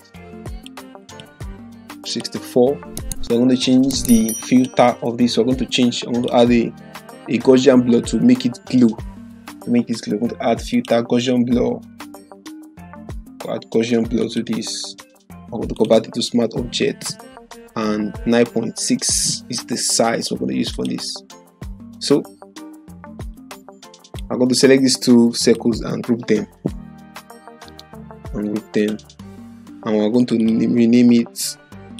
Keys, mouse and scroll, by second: 4.4 click, 10.8 click, 14.2 click, 21.0 click, 23.1 click, 25.4 ctrl+click, 26.7 ctrl+g, 28.8 right click, 30.2 click.